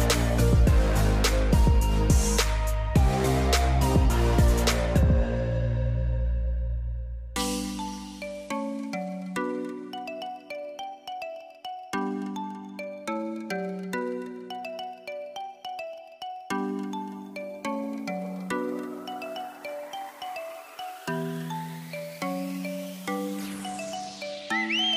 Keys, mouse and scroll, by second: 2.1 click, 5.3 scroll, 5.5 scroll down 1, 5.8 scroll, 6.1 scroll down 1, 15.7-16.0 scroll, 22.0 scroll.